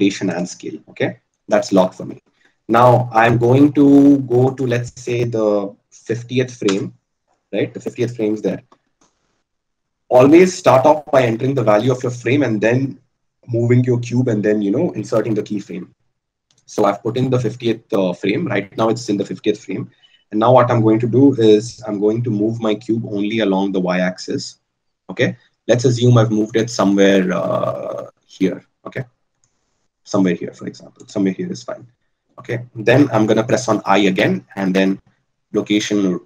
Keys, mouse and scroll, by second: 5.0 right click, 20.9 g.